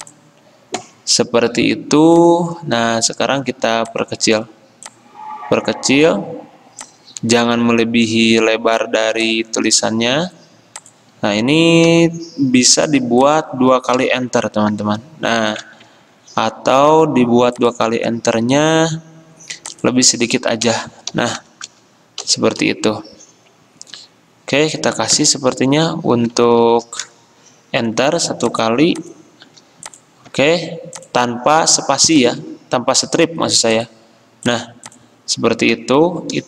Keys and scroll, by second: 12.0 t, 14.2 Return, 14.6 Return, 16.1 ctrl+z, 20.8 BackSpace, 21.2 ., 21.8 Return, 22.7 BackSpace, 25.2 Return, 25.7 Delete, 32.5 m.